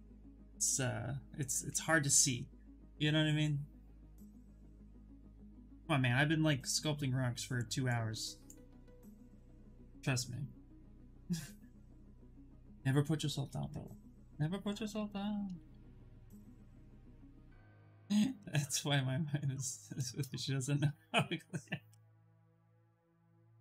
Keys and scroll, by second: 15.5 shift+f, 15.7 shift+f, 16.5 space.